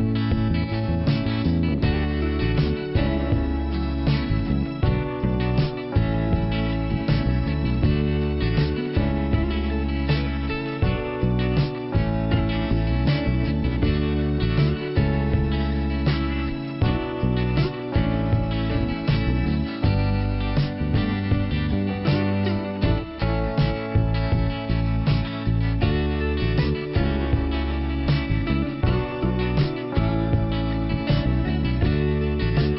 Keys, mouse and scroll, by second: 7.4 click, 9.1 click, 10.1 click, 10.3 click, 10.8 click, 13.8 click, 15.7 click, 16.5 click, 18.0 click, 20.2 click, 23.4 click, 24.1 click, 24.2 double click, 24.5 double click, 24.9 double click, 25.0 double click, 26.3 double click, 29.3 click, 30.1 click.